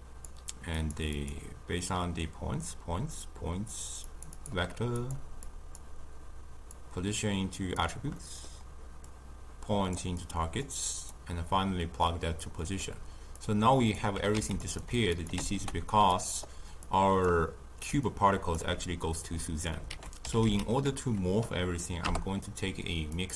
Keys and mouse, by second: 9.9 click, 12.0-15.3 drag, 15.3 ctrl+x, 18.0-23.1 right drag.